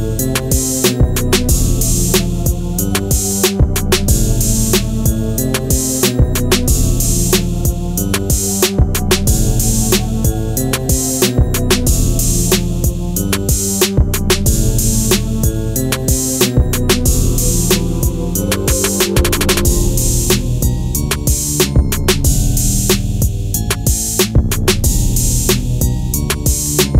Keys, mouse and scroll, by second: 4.4 click, 11.2-12.1 scroll up 1, 12.7-13.1 scroll down 1, 13.6-24.6 drag, 26.6-26.9 scroll down 1.